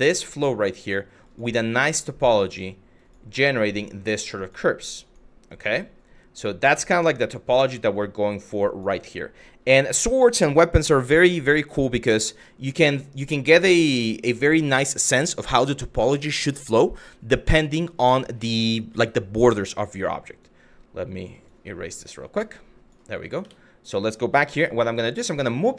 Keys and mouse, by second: 0.5 click, 0.9 click, 1.4 click, 2.1 click, 2.7 click, 3.2 click, 4.0 click, 4.7 click, 5.1 click, 6.3-8.4 drag, 20.1 click, 21.2-22.6 drag, 23.0 Tab, 24.1 g, 25.2 click, 25.6 shift+middle click.